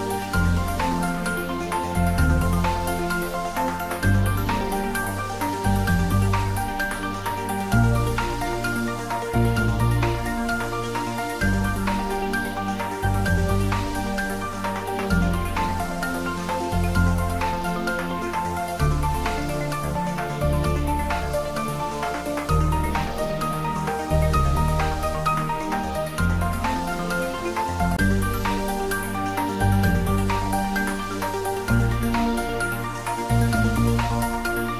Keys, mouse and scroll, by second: 0.8-3.0 middle drag, 3.0-6.0 drag, 6.0 click, 10.6 Tab, 11.4 click, 12.9 3, 15.2 click, 18.0 click, 23.3-28.9 drag, 32.6 shift+click, 33.5 shift+right click, 34.2 shift+click.